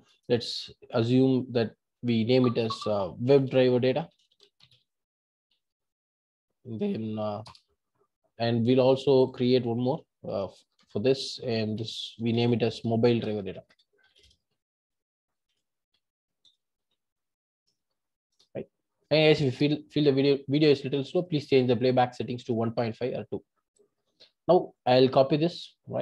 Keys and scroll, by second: 10.3 super+n.